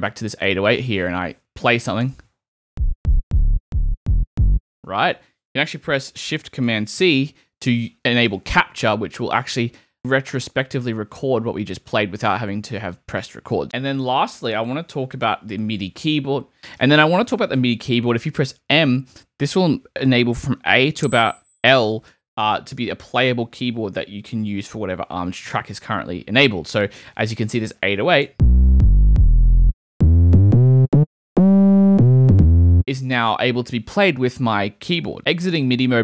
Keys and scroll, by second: 2.0 space, 5.0 space, 7.0 shift+super+c, 13.6 BackSpace, 18.7 m, 28.2-32.1 typing, 35.6 m.